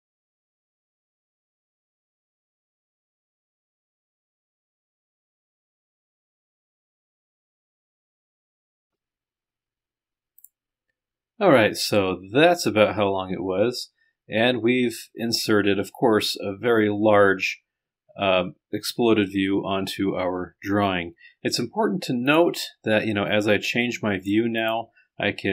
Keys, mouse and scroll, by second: 0.7 scroll up 2, 1.2 click, 2.3-3.3 drag, 3.9 click, 5.9 click, 7.7 click, 10.4 click, 14.8-16.2 scroll down 2, 17.7-19.2 scroll up 2, 19.2-20.7 scroll up 1, 20.9-21.7 scroll down 1, 22.3 click, 23.1 middle click, 23.3 right click, 24.1 click, 24.6 middle click.